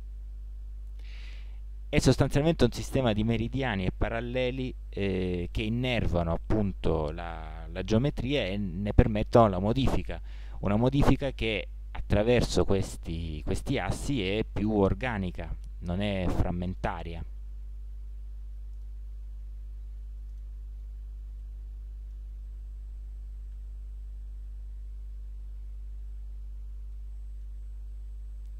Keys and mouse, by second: 0.4 middle click, 0.5 middle click, 5.5-6.8 middle drag, 7.3 middle click, 11.3-17.9 middle drag, 20.4-22.3 middle drag, 23.6-24.5 middle drag, 23.6 s, 26.5 middle click.